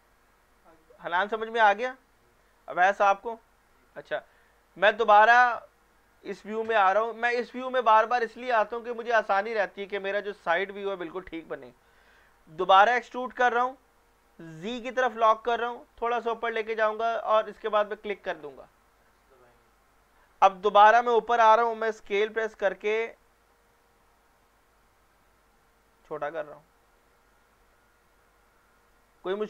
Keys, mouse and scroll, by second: 5.0-5.9 middle drag, 6.7 scroll up 1, 11.7-12.1 scroll down 1, 13.0 e, 14.6 z, 17.9 click, 20.7-21.7 middle drag, 22.2 s, 26.0 click, 27.7-28.2 scroll down 1, 28.2-29.4 middle drag.